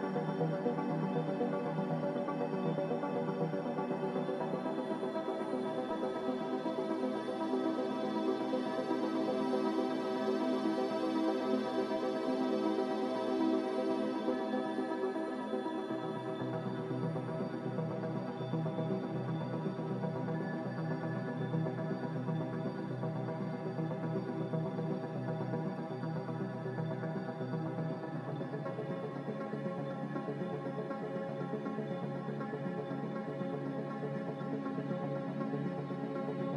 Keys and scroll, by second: 6.2 ctrl+z, 9.3 ctrl+z, 10.4 Return, 10.4 a, 32.1 z, 34.4 typing, 34.7 Return.